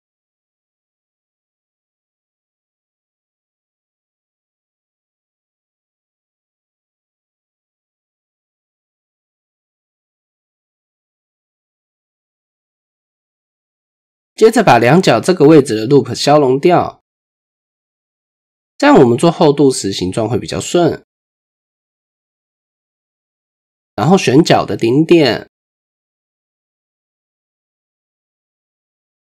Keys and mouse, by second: 0.7-2.1 drag, 2.9 click, 4.4 shift+middle click, 6.0 click, 7.4-7.9 middle drag, 8.7 click, 9.1-10.2 middle drag, 11.1-12.3 middle drag, 11.8-12.6 typing, 13.4 shift+middle click, 14.2 shift+click, 15.3 shift+click, 17.6 x, 19.8 shift+click, 20.2 middle click, 22.4 click, 22.8 middle click, 24.5 click, 25.5 ctrl+click, 26.9 click.